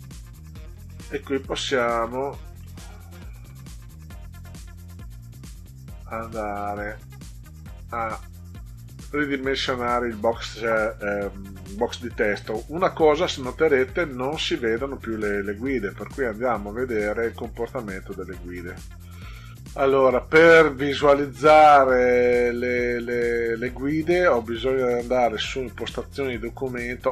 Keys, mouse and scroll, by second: 0.7-2.1 drag, 2.7 middle click, 4.6-7.7 drag, 13.9 ctrl+scroll down 2, 15.7 click, 16.8 click, 17.9-18.3 scroll down 2, 21.2 scroll down 2, 22.8 click.